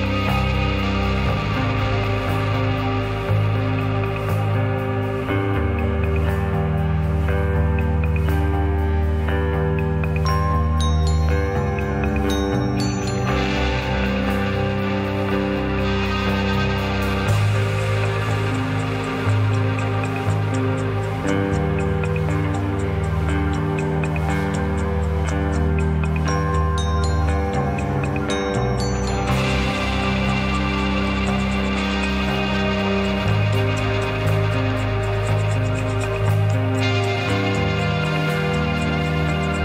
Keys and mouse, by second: 0.1-0.8 middle drag, 3.7 s, 5.3-6.1 middle drag, 6.6 g, 9.4 g, 13.6-14.4 middle drag, 14.9-15.2 shift+middle drag, 15.3 middle click, 16.4 shift+click, 16.8-17.7 middle drag, 18.4-19.2 shift+middle drag, 19.6 shift+middle click, 20.6-21.5 shift+middle drag, 22.2 middle click, 23.3 shift+middle click, 25.2 Tab, 26.4-27.0 middle drag, 27.8 click, 28.3 click, 28.9 Tab, 29.4 click, 29.6 Tab, 30.6 click, 30.8-31.7 drag, 31.7 middle click, 32.1 shift+middle click, 33.1 middle click, 35.6 middle click.